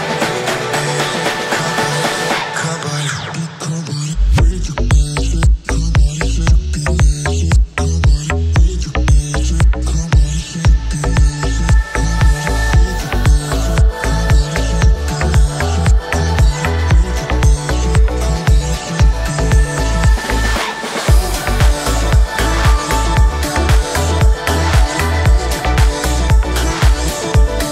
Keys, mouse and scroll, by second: 0.0 right click, 1.1 right click, 1.5 g, 2.0 right click, 3.7 click, 4.3 click, 8.3 click, 9.1-10.6 scroll down 4, 10.6-12.8 drag, 12.8 right click, 13.6 space, 13.9 g, 15.9 space, 16.3-19.2 middle drag, 19.2 space, 19.8 g, 24.8-25.3 middle drag, 25.3 g.